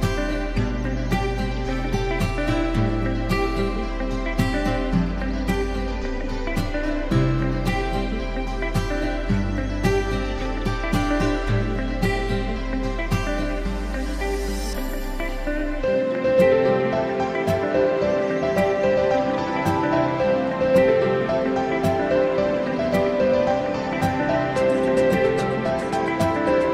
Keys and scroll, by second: 22.9 ctrl+shift+j.